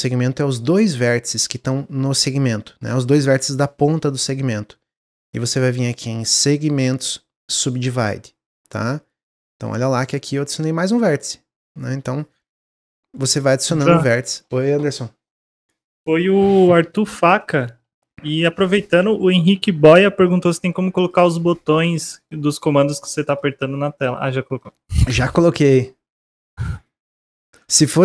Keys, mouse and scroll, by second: 6.4-9.4 drag, 10.2-11.8 drag, 13.3-18.5 middle drag, 18.5 click, 20.2 click, 21.4 shift+middle click, 22.2 scroll up 1, 22.5-22.9 scroll down 2, 22.9 middle click, 23.4 scroll down 1, 24.0-27.2 middle drag, 27.2 click, 27.8 middle click.